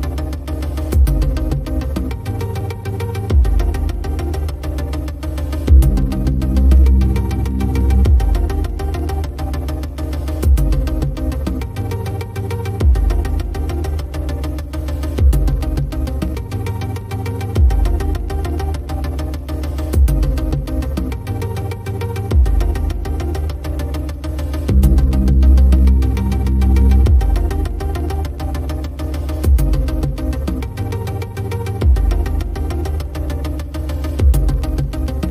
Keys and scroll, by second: 3.7 7, 4.0 Return, 7.1 i, 20.4 super+c, 20.6 super+v, 32.0 i.